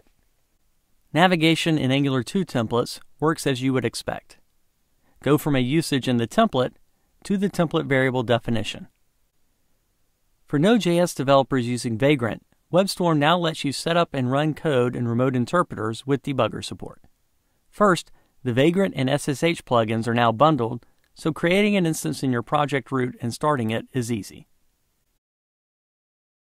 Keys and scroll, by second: 7.0 super+b.